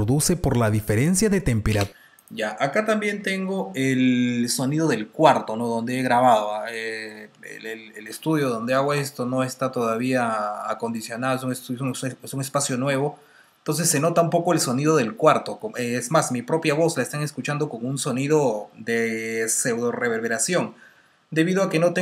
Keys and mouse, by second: 1.6 space, 2.6 click, 2.9 space, 3.3 t, 5.3 space.